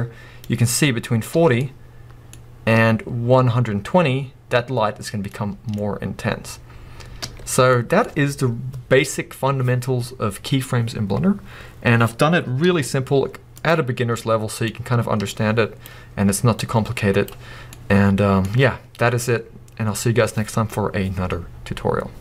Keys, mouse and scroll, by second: 1.6-5.7 middle drag, 5.9-7.2 scroll up 1, 7.2 space, 7.7 middle click, 12.6 z, 13.9 scroll down 2, 14.1-15.3 middle drag, 15.3-17.7 drag, 17.7-21.7 middle drag.